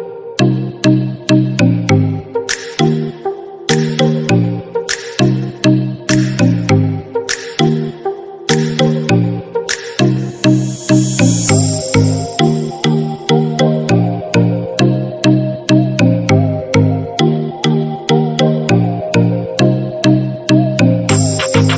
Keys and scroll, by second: 0.1 ctrl+j, 18.7 ctrl+=.